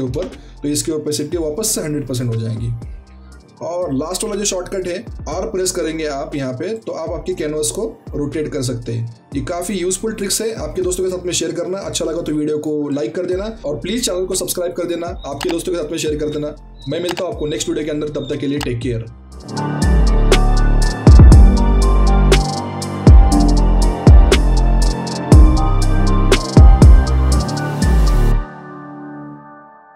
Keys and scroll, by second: 0.1 KP_0, 5.8 r.